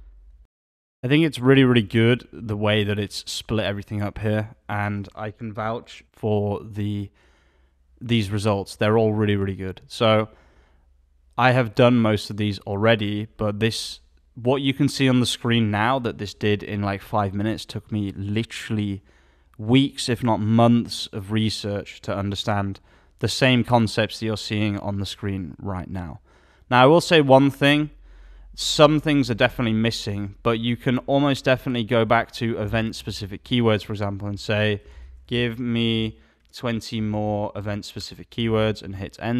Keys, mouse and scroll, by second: 33.0 alt+a.